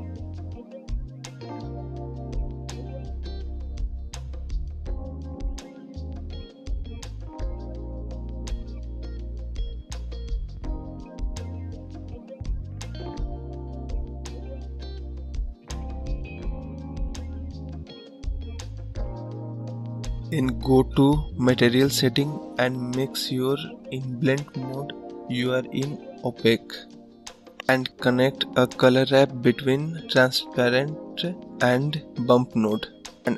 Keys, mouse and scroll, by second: 0.3 click, 3.1 click, 5.1-17.0 drag, 19.2 click, 20.6 click, 23.9 click, 24.2-24.5 scroll up 3, 29.1-31.4 drag.